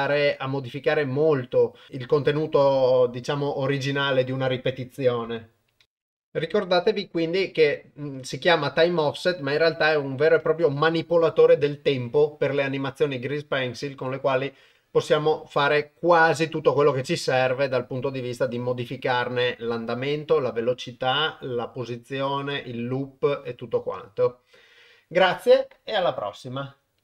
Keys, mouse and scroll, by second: 6.0 shift+space, 8.2-10.1 drag.